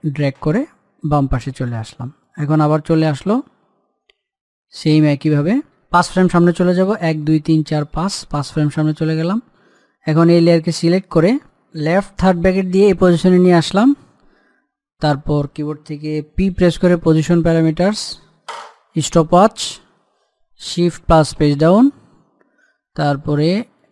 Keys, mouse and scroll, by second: 2.2 click, 5.3-6.0 scroll down 1, 6.0 scroll up 1, 6.9 Page_Down, 8.9 click, 11.9 click, 16.7 p, 19.1 click, 21.9 shift+Page_Down.